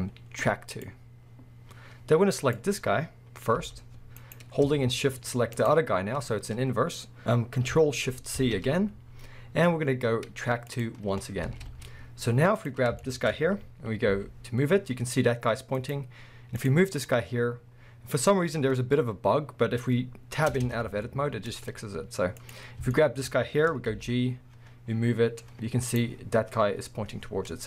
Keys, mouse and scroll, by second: 2.4 click, 3.6 g, 4.3 right click, 5.6 shift+click, 7.2 ctrl+p, 8.4 ctrl+shift+c, 11.3 scroll down 1, 11.5 alt+a, 11.8 scroll up 1, 12.6 click, 13.0-15.9 shift+middle drag, 14.1 g, 15.9 right click, 16.5 click, 18.2 scroll up 1, 19.1 scroll down 1, 20.5 Tab, 21.6-22.1 scroll up 1, 22.4 click, 22.9-26.0 shift+middle drag, 23.9 g, 26.0 right click, 27.2 scroll down 1.